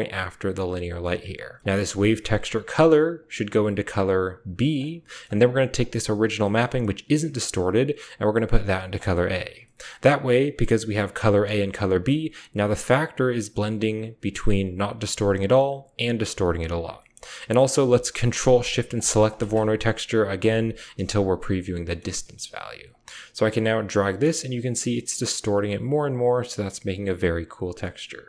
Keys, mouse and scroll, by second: 0.2 click, 1.0 click, 1.4 drag, 1.6 click, 2.9 click, 3.2-3.5 drag, 3.9-4.5 drag, 5.0 click, 5.3-6.1 typing, 5.5 click, 7.6-8.8 drag, 8.8 middle click, 9.1 click, 9.2-9.9 middle drag, 12.2-14.5 drag, 15.5 click, 16.8 middle click, 18.2 ctrl+shift+click, 18.7 ctrl+shift+click, 19.1 ctrl+shift+click, 19.2 ctrl+shift+click, 19.6 typing, 20.2 ctrl+shift+click, 21.8-22.6 typing, 22.1 drag, 22.7-26.4 drag.